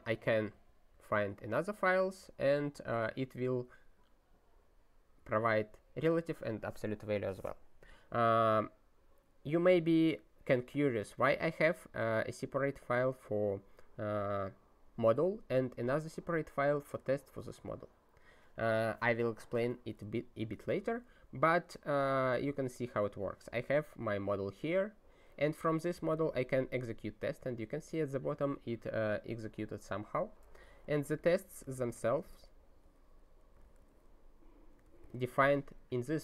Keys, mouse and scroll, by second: 0.5 ctrl+n, 0.9 ctrl+e, 4.9-5.3 scroll down 1, 11.0 click, 12.3 click, 15.7 click, 24.1 scroll up 1, 24.3 scroll, 24.7 scroll down 1, 24.8 scroll, 31.0 f, 32.0 ctrl+/.